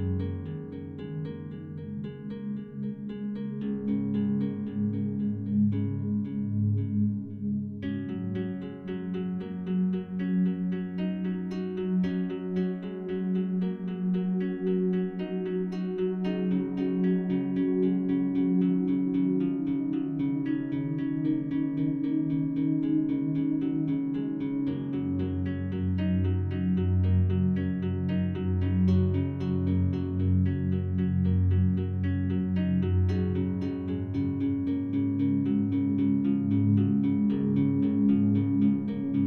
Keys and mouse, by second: 3.3 ctrl+s, 8.6 click, 10.8 drag, 11.8 ctrl+click, 14.1-15.8 drag, 16.2 click, 16.4-18.1 drag, 21.6-22.9 drag, 23.4 drag, 24.3 click, 25.9 click, 26.9 click, 29.9 super+d, 31.2 click, 32.1 click, 32.7 click, 33.0 click, 35.0 click, 35.5 click, 36.5 click, 37.7 click, 38.1 click.